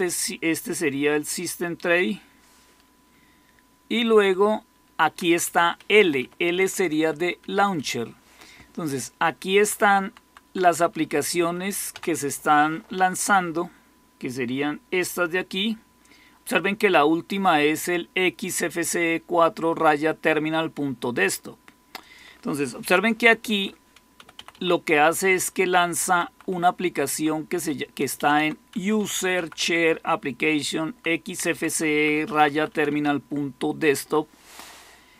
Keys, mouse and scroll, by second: 2.9-4.1 Down, 5.0 Down, 5.2 Down, 5.7 Up, 6.0 Up, 6.1 Up, 6.3 Up, 6.5 Up, 6.9 Up, 7.1 Up, 7.5 Up, 8.3-9.1 Down, 9.2 Down, 9.3 Down, 9.4 Down, 9.6 Down, 9.8 Down, 10.2 Down, 10.4 Down, 10.6 Up, 10.8 Up, 11.0 Up, 11.2 Up, 11.4 Up, 11.8 Down, 23.1 Down, 23.4 Up, 24.1 Right, 24.2 Right, 24.4 Right, 26.1 Right, 26.4 Right, 26.9 Right, 27.0 Right, 28.1 Left, 28.2 Left, 28.6 Right, 28.9 Right, 29.1 Right, 29.3 Right, 29.5-30.9 Right, 31.1 Right, 31.3 Right, 31.6 Right, 31.9 Right, 32.3 Right, 32.5 Right, 32.8 Right, 33.0-34.0 Right.